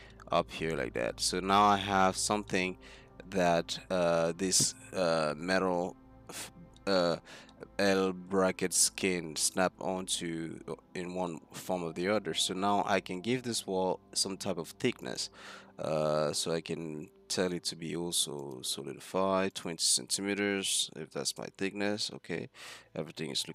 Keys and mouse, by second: 11.9 Tab, 12.7 z, 15.1 middle click, 16.3-17.5 drag, 19.6-21.5 drag, 22.4 z.